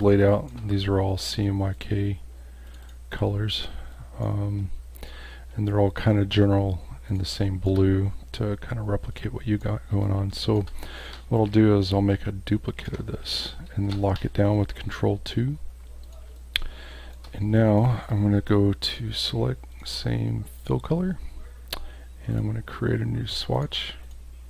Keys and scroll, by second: 7.3 space, 10.0 space, 13.8 ctrl+2, 16.3 space.